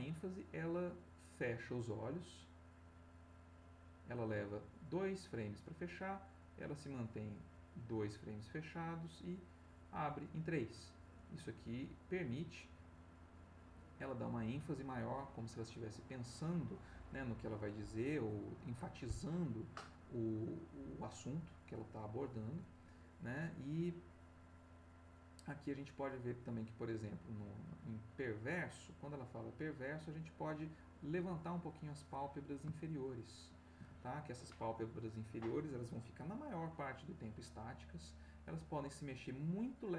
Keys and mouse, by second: 31.7 click, 33.0 shift+click, 37.1-39.9 drag.